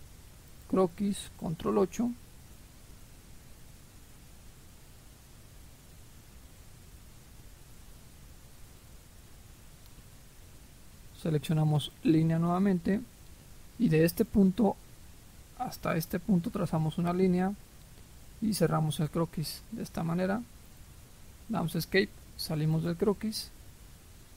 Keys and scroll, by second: 1.6 ctrl+8, 21.4 Escape.